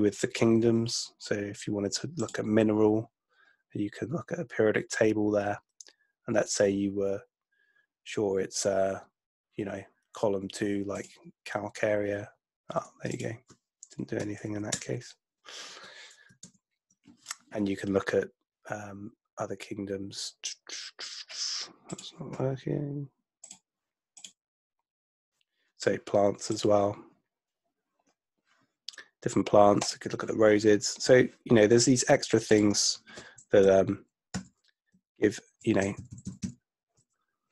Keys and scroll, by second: 14.2 Delete, 14.7 Return, 16.5 super+BackSpace, 33.7 Right, 34.3 Right, 35.0 Right, 35.9 Left.